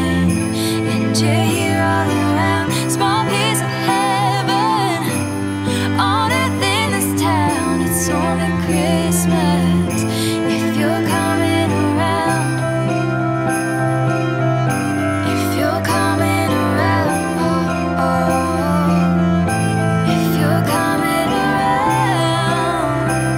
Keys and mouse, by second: 6.2 click, 10.4 click, 12.1-18.5 drag, 19.1 click, 19.9 KP_0, 20.8 g, 20.9 z.